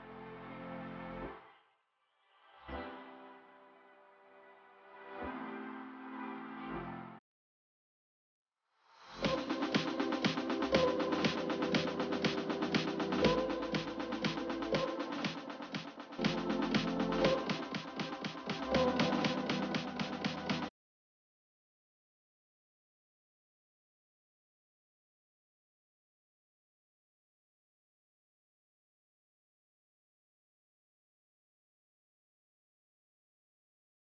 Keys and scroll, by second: 5.5 ctrl+space, 14.7 ctrl+space, 21.4 ctrl+space, 29.5 ctrl+g.